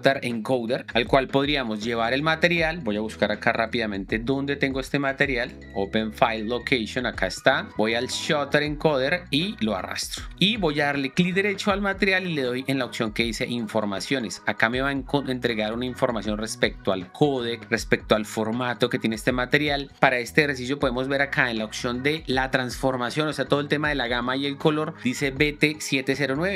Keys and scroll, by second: 4.2 shift+4, 7.7 alt+Tab.